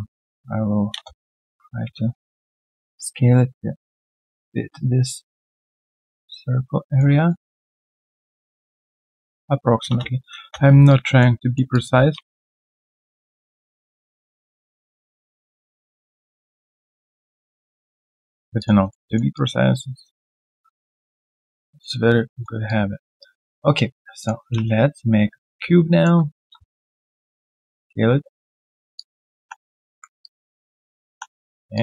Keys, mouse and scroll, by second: 1.8 typing, 4.7 alt+right click, 6.6 alt+middle click, 7.2 middle click, 9.4-9.8 scroll down 1, 10.4 space, 10.8 alt+click, 11.4 alt+middle click, 11.7 alt+click, 11.9 w, 12.4 shift+click, 13.1 alt+middle click, 14.3-15.0 typing, 16.4 shift+click, 17.4-18.0 typing, 17.6 alt+click, 18.0 right click, 18.6 alt+click, 18.8 alt+right click, 19.0 alt+middle click, 19.3 alt+click, 20.7 alt+middle click, 21.0 alt+click, 22.3 alt+middle click, 22.6 alt+click, 24.6 shift+right click, 26.1-27.0 typing, 28.9 alt+click, 29.9 typing.